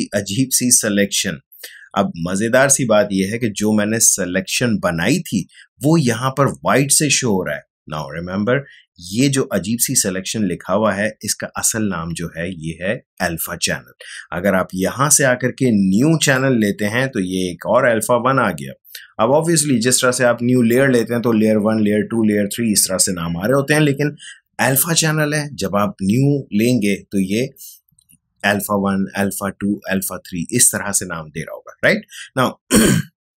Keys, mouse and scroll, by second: 16.1 click.